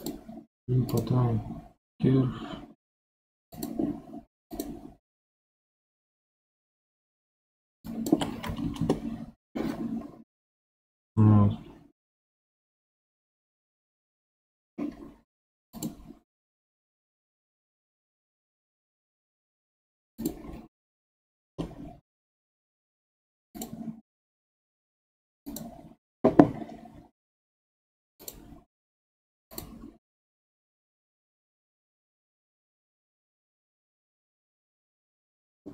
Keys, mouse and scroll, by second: 0.0-3.1 drag, 3.5 click, 5.6-7.8 scroll down 2, 7.8-9.8 shift+drag, 9.8 scroll down 1, 9.9-11.1 scroll up 7, 11.1-14.2 middle drag, 15.7-18.9 drag, 20.2-23.2 drag, 23.5-26.5 drag, 26.5 scroll down 1, 28.2-31.2 drag.